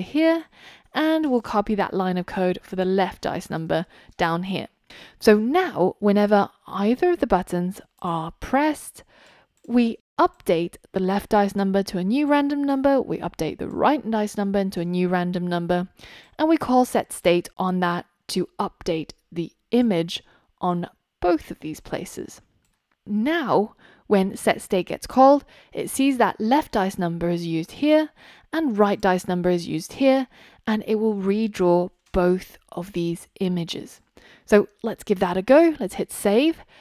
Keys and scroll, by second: 1.9 super+c, 3.7 super+v, 35.3 super+s.